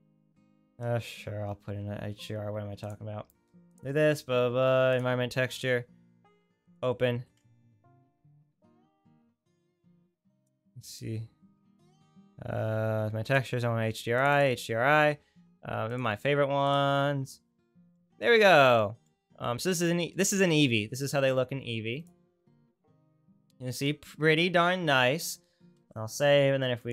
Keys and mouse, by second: 0.1-2.9 right drag, 22.1-26.0 right drag, 26.0 ctrl+s, 26.8 click, 26.8 right click.